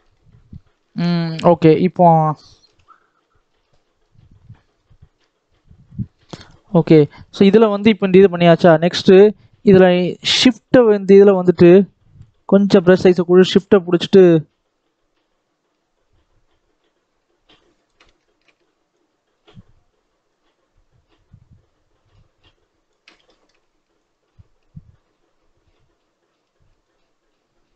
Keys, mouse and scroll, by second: 2.0-2.6 scroll up 1, 2.6 ctrl+KP_7, 3.7 scroll up 1, 3.9-4.3 scroll down 4, 4.3 middle click, 4.7-5.0 scroll up 3, 5.0 middle click, 5.9 shift+middle click, 6.6 scroll down 2, 6.7 shift+middle click, 7.0-8.6 scroll up 5, 8.6 middle click, 8.9-9.2 scroll down 1, 9.2 shift+middle click, 9.5-9.8 scroll up 4, 9.8 shift+middle click, 10.4-11.7 scroll down 1, 11.7-16.6 drag, 18.1 shift+middle click, 18.8-21.8 shift+drag, 23.2 shift+middle click, 23.9-27.0 shift+drag.